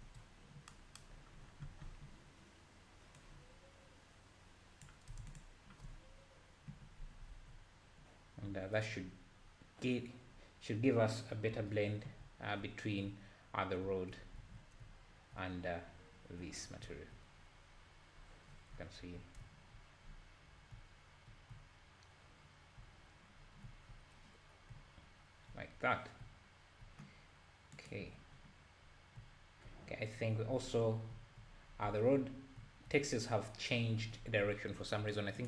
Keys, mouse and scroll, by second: 4.9-5.5 drag, 6.0-6.5 scroll down 1, 6.5 scroll down 1, 7.3 alt+a, 8.0 scroll down 2, 8.5 scroll up 4, 9.4-10.0 scroll down 1, 10.3-10.9 scroll up 2, 10.9-11.5 scroll down 1, 11.5-12.1 scroll down 1, 12.2 `, 13.5-13.8 scroll down 2, 13.8 `, 14.4 alt+a, 14.6 scroll up 1, 14.8 `, 16.8 `, 17.4-18.5 scroll up 5, 18.5-19.4 scroll down 11, 19.4 `, 20.1-20.7 scroll up 1, 20.7 scroll up 3, 20.7 `, 21.5 `, 21.6-22.3 scroll down 2, 23.4-23.7 scroll down 2, 23.7 `, 24.4-24.7 scroll down 3, 24.7 `, 25.7 scroll up 3, 27.9-28.4 drag, 28.4-28.8 scroll down 3, 28.8-29.2 scroll up 2, 29.2 `, 30.9 scroll down 1, 31.1 `, 31.7 scroll down 2, 31.8 `, 32.2-32.6 scroll up 1, 32.6 `.